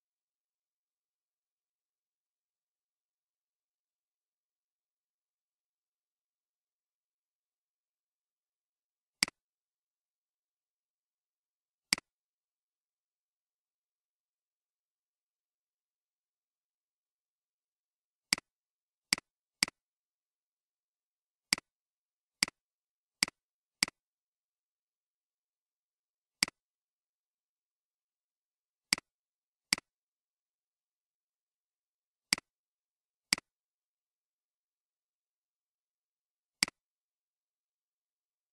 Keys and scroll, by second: 34.1-34.6 typing, 34.6 Return.